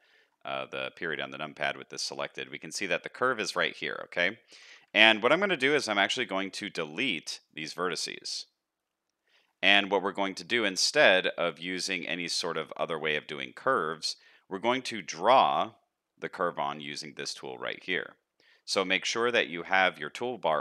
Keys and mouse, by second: 1.0 shift+middle click, 2.2 middle click, 3.0 middle click, 4.6 a, 5.7 x, 10.4 middle click, 11.9 shift+middle click, 12.3 middle click, 12.7 shift+middle click, 13.2 middle click, 13.6 shift+middle click, 19.0 t, 19.0 r, 19.5 t.